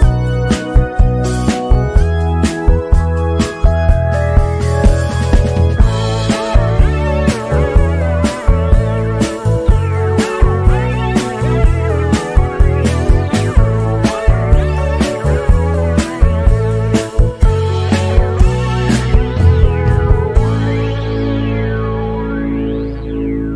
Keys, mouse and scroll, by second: 7.4 ctrl+d, 8.2-10.3 drag, 10.3-12.5 shift+drag, 16.8 click, 17.6 Escape, 18.0 click.